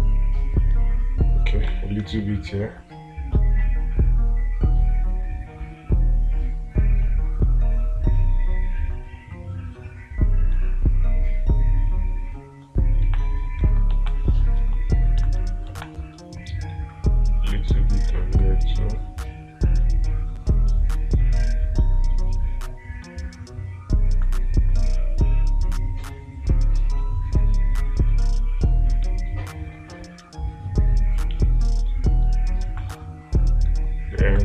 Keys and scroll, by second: 2.1 space, 13.5 space, 14.5 space, 16.1 space, 33.1 space.